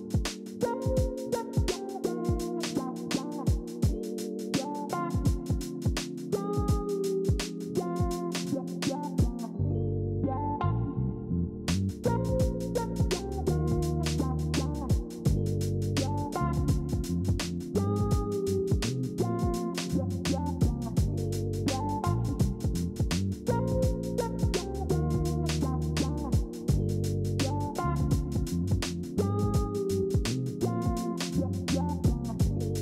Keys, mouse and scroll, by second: 8.8 ctrl+c, 9.0 ctrl+f, 14.2 ctrl+4, 16.4 ctrl+z, 20.5 ctrl+z, 24.5 alt+scroll up 3, 28.3-29.4 alt+scroll.